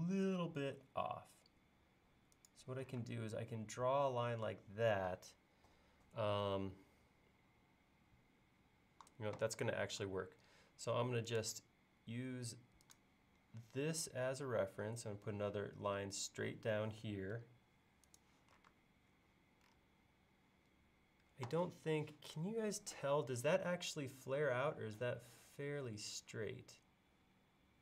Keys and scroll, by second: 3.0 space, 10.0 l, 17.4 Up, 18.7 space.